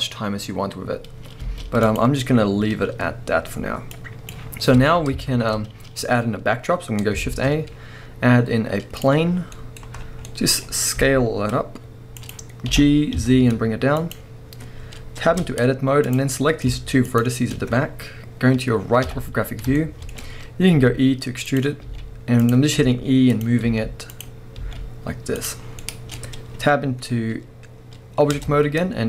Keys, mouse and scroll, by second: 1.4 middle click, 1.4 space, 1.9-5.3 drag, 4.5 scroll down 1, 4.7 alt+a, 5.3-12.3 shift+middle drag, 5.8-6.3 scroll down 1, 6.3-7.3 scroll up 1, 7.3 shift+a, 9.3 scroll down 1, 10.0 scroll down 1, 10.6-11.0 scroll down 1, 11.0 s, 12.3 click, 12.7 g, 14.1 click, 15.3 Tab, 16.0 click, 16.4-17.1 middle drag, 17.1 shift+click, 19.0 KP_3, 19.8-21.6 shift+middle drag, 20.1-20.7 scroll up 1, 21.6 click, 22.5 click, 23.4 click, 24.2 click, 25.5 click, 25.6 scroll down 1, 25.8-28.3 middle drag, 28.3 Tab.